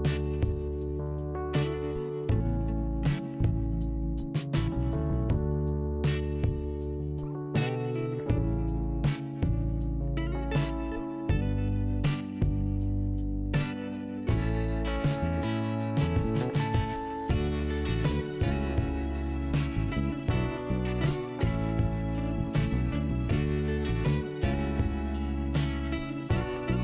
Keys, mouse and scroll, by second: 0.6 click, 2.7 click, 3.7 click, 5.6 scroll down 1, 7.0 click, 8.6 click, 11.5 click, 12.5-13.6 scroll down 1, 13.6 click, 14.1 click, 15.9 scroll up 1, 16.9 click, 17.7-18.5 scroll up 1, 19.7 click, 23.3 click.